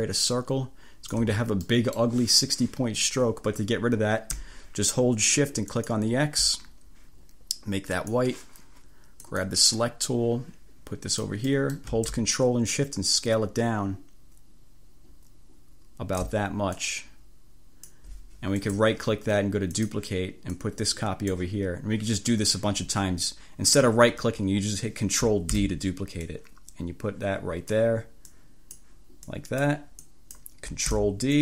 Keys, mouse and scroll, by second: 1.7 click, 5.9 click, 8.1 click, 9.3 click, 10.2-11.5 drag, 11.6 click, 15.1-16.5 drag, 16.9-18.2 drag, 18.7 click, 19.9 click, 20.6-21.6 drag, 25.7 ctrl+d, 26.3-28.0 drag, 28.4 click, 29.3 click, 30.1 click, 31.0 ctrl+d.